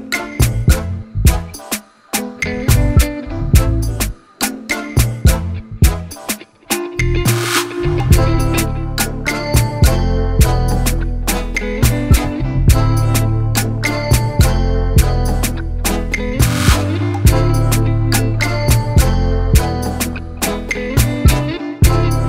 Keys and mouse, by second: 1.6 click, 2.9 shift+click, 5.5 click, 7.4 shift+click, 10.0 shift+click, 11.5 shift+click, 13.0 click, 14.1 shift+click, 15.5 click, 17.1 click, 20.0 click, 21.9 click.